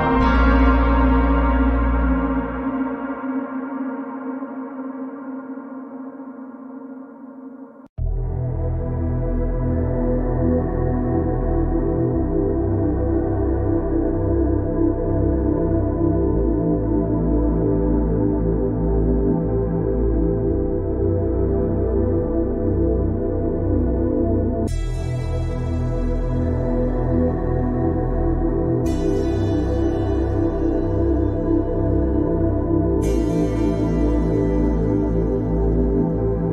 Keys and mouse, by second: 1.6-2.4 middle drag, 3.4-3.8 middle drag, 5.6 click, 7.2-7.9 drag, 9.0 click, 9.8 click, 14.2 click, 14.8 click, 20.1 alt+drag, 21.7 shift+click, 22.8 click, 23.5 click, 26.1-26.4 shift+drag, 35.1 click.